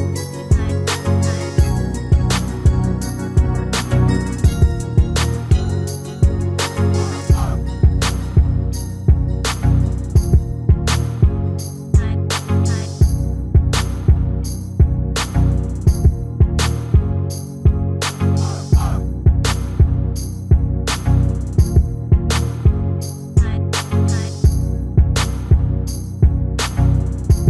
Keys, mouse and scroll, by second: 5.7 ctrl+l, 7.6-9.4 drag, 10.6-15.3 middle drag, 17.2 Tab, 20.4 middle click, 21.3-24.2 middle drag, 23.6 KP_1, 25.6 KP_3.